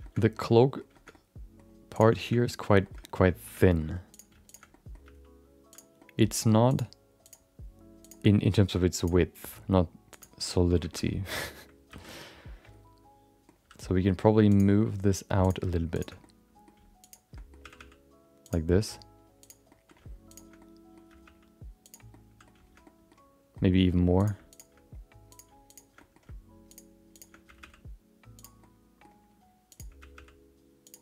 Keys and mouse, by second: 0.0 shift+middle click, 0.2 middle click, 0.4 middle click, 0.9 shift+middle click, 1.1 middle click, 2.2 middle click, 2.8 shift+middle click, 3.0 middle click, 3.4 Tab, 3.6 middle click, 4.1 click, 4.4 click, 4.7 middle click, 5.0 g, 6.0 middle click, 6.3 g, 7.2 click, 8.0 click, 8.9 click, 9.4 g, 10.4 middle click, 10.9 middle click, 11.0 middle click, 11.9 alt+z, 12.1-13.4 middle drag, 13.8 middle click, 14.5 click, 14.7 middle click, 15.4 click, 15.9 click, 16.2 middle click, 17.0 shift+click, 17.3 middle click, 17.6 g, 18.7 middle click, 19.4 click, 19.7 middle click, 20.3 shift+click, 20.5 middle click, 21.1 g, 22.1 middle click, 22.8 middle click, 23.5 middle click, 24.2 click, 24.5 shift+click, 25.3 click, 25.7 shift+click, 25.9 middle click, 26.7 shift+click, 27.1 shift+click, 27.4 g, 28.6 middle click, 29.7 click, 30.0 g.